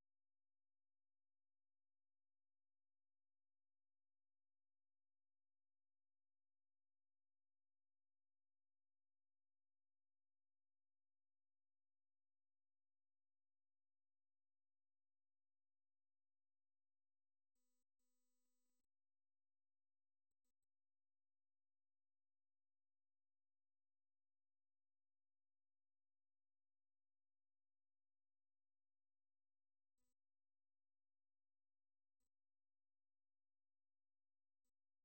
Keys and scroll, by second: 1.7 typing, 3.1-4.0 typing, 5.2-9.7 typing.